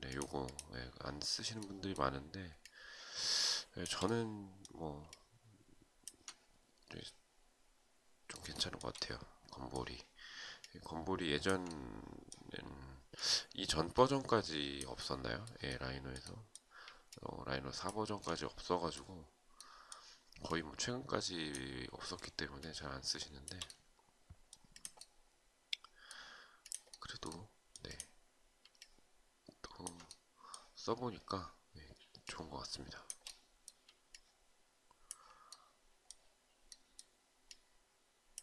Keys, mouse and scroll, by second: 4.6 alt+click, 8.1 shift+right click, 10.1 alt+click, 16.6 alt+click, 22.1 shift+click, 28.3 alt+click, 33.6 alt+click.